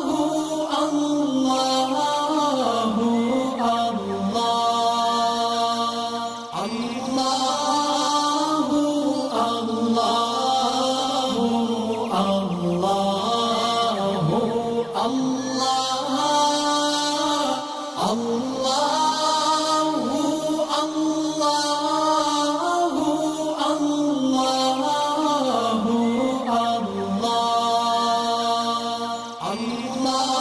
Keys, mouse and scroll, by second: 4.4 alt+scroll up 1, 6.2 click, 6.6 alt+scroll down 1, 6.7 space, 6.8 click, 7.2 alt+scroll up 1, 8.3 click, 8.6 alt+scroll down 1, 9.7 click, 12.1 ctrl+shift+], 13.2 click, 19.6 alt+scroll down 1, 20.2 alt+scroll down 2, 20.5 alt+scroll up 2, 21.2-25.8 drag, 28.9 alt+scroll down 1, 29.7 space, 29.8 click, 30.1 alt+scroll up 1.